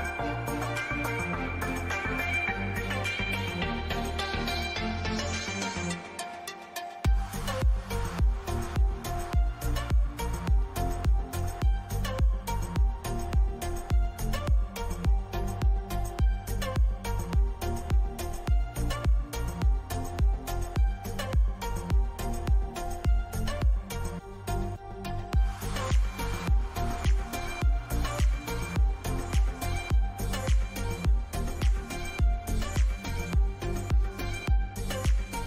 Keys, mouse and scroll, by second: 19.4-23.2 middle drag, 23.2-25.5 drag, 25.5 ctrl+r, 28.2-30.8 middle drag, 32.2 KP_7, 33.5 a, 33.8-35.4 middle drag.